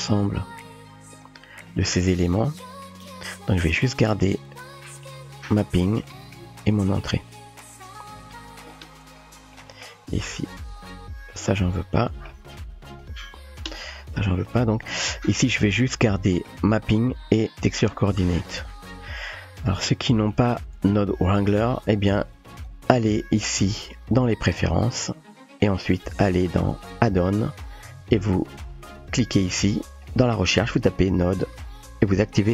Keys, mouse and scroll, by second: 0.0-8.2 typing, 0.8-1.2 drag, 1.8 middle click, 2.7-3.2 drag, 3.6-4.3 drag, 4.7-5.5 drag, 6.2 middle click, 6.8 click, 7.3-8.2 drag, 9.7 middle click, 10.4-11.1 typing, 10.6 click, 11.6 Delete, 12.1 middle click, 13.6 click, 13.6 Delete, 14.7 click, 15.5 typing, 16.2 middle click, 17.8 click, 18.5 shift+click, 20.3 middle click, 22.5 click, 22.6 typing, 24.4 click, 25.6 click, 29.4-32.5 drag.